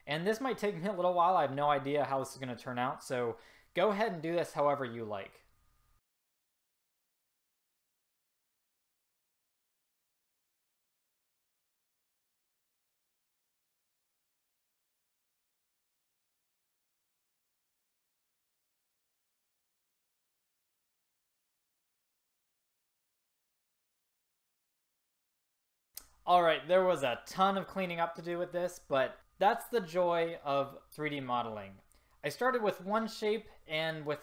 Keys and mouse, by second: 6.0 click, 6.5 click, 6.8-7.1 ctrl+z, 7.1 e, 7.3 s, 9.0 click, 9.6 ctrl+z, 9.7 click, 10.2 s, 10.5 click, 10.9 click, 11.5 ctrl+z, 11.8 s, 12.2 a, 12.3 click, 13.1 ctrl+z, 13.3 ctrl+z, 13.3 s, 13.7 click, 13.9 s, 14.3 click, 14.5 click, 14.9 click, 15.2 ctrl+z, 17.1-18.3 middle drag, 20.1 middle click, 21.0 ctrl+z, 21.1-23.5 typing, 21.7 middle click, 21.8 ctrl+z, 22.0 ctrl+z, 22.4 middle click, 24.3 middle click, 24.5 s, 25.7 a.